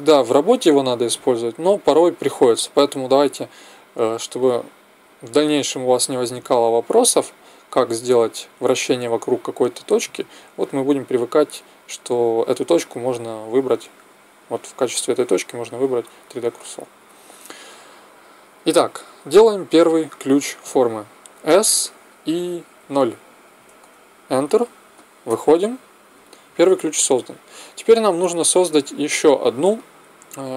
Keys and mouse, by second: 21.5 s, 25.2 Tab.